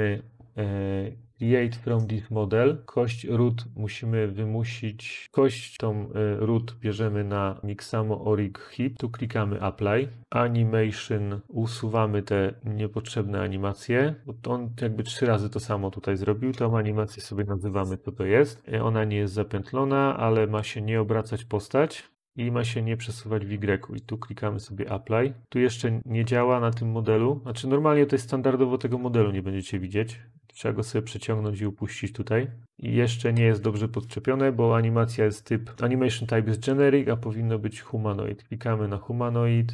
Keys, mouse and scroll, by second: 16.3-17.5 typing.